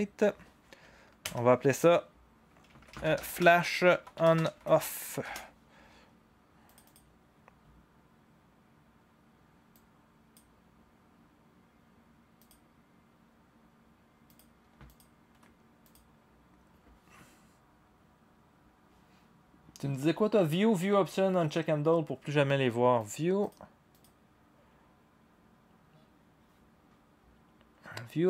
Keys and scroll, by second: 1.2 Return, 2.5-5.9 typing, 9.9 typing.